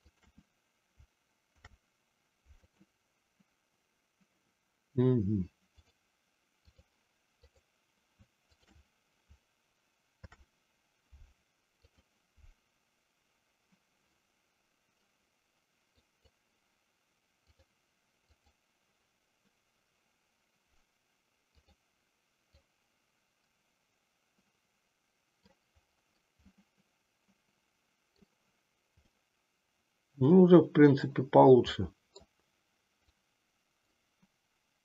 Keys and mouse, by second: 0.0 shift+click, 1.5 ctrl+p, 5.8-7.0 drag, 7.5 click, 8.5 shift+click, 10.1 ctrl+p, 16.0 click, 17.4-18.5 drag, 22.7-25.8 drag, 26.5-28.3 middle drag, 29.0-31.1 middle drag, 31.9 middle click, 33.0-33.9 drag.